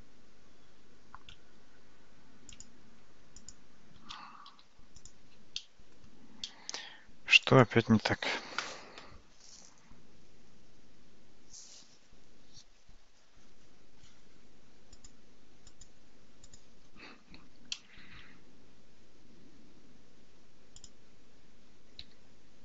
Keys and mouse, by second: 4.6 x, 5.6-6.0 middle drag, 6.5 middle click, 7.5 click, 15.0-16.6 drag, 18.3 shift+a, 22.1 g.